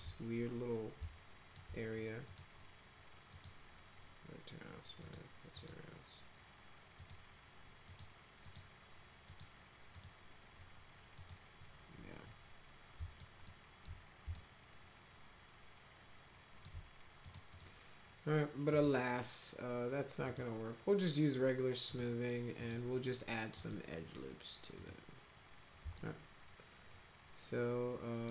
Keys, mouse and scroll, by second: 1.0 alt+middle click, 2.2 click, 3.3 click, 5.0 click, 5.5 click, 6.9 click, 7.8 click, 8.4 click, 9.2 click, 9.9 click, 11.1 click, 12.9 alt+click, 13.4-13.8 alt+middle drag, 14.3-16.6 alt+middle drag, 17.2 click, 17.5 right click, 18.6 click, 20.2 click, 21.8 click, 22.5 click, 23.5 click, 24.7 click, 25.9-28.2 alt+middle drag.